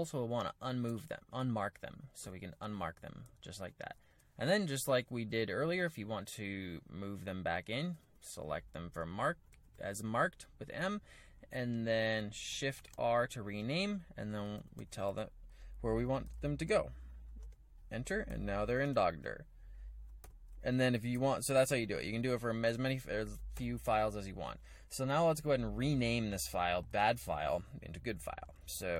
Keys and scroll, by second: 0.0-6.5 typing, 7.7-11.7 typing, 12.8-22.1 typing, 23.5 u, 24.7 k, 26.4-27.1 typing.